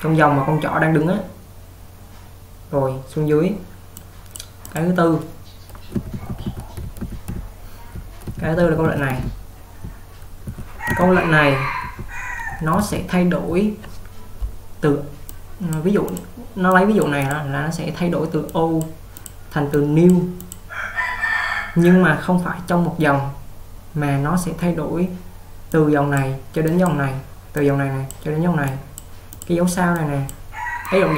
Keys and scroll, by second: 6.1-13.8 typing.